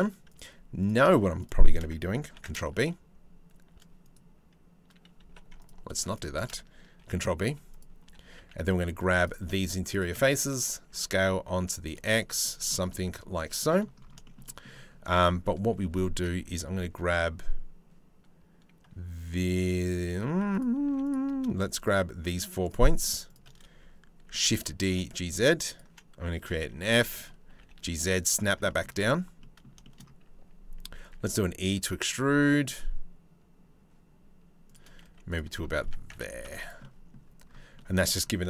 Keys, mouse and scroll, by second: 4.8 2, 5.2 alt+click, 6.6 ctrl+b, 7.7 3, 8.0 z, 8.6 3, 8.8 click, 10.5 s, 11.8 z, 12.1 click, 12.5 middle click, 12.6 click, 13.0 Tab, 13.3 click, 13.8 shift+click, 14.0 click, 14.7 Tab, 15.5 3, 15.7 click, 19.9 z, 20.5 1, 22.2 shift+click, 22.9 shift+click, 23.9 shift+d, 24.4 g, 26.1 f, 26.4 z, 27.1 g, 28.3 middle click, 29.4 shift+middle click, 30.7 e, 34.6 z, 35.4 Tab, 35.7 Tab, 36.1 Tab, 36.2 click, 36.4 middle click, 37.3 middle click.